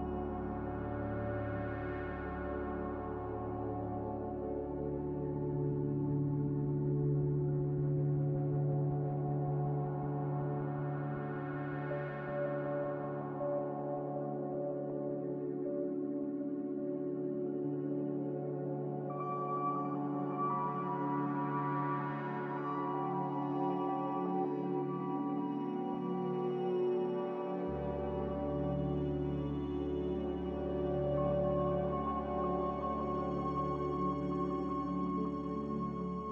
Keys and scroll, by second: 10.9 n, 13.7 Escape, 13.8 Escape, 15.8 typing, 16.8 Return, 17.5 z, 19.9-20.5 typing, 20.1 Return, 22.9 n, 34.6 n.